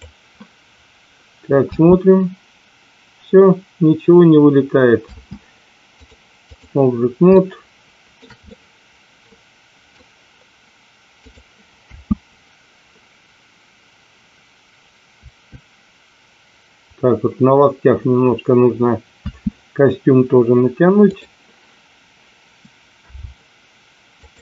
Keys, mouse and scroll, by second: 1.7 space, 5.2 space, 6.0-6.8 drag, 7.3-8.0 middle drag, 8.4-9.9 middle drag, 11.8 space, 19.5 space, 21.0 click, 23.0 a, 24.2 click.